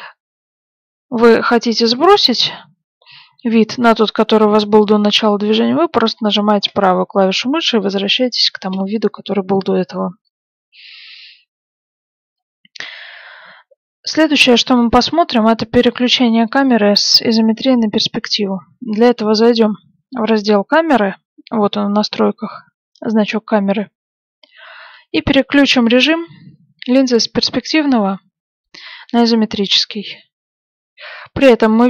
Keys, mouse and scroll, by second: 16.4 click, 23.2-26.1 middle drag, 28.9 click.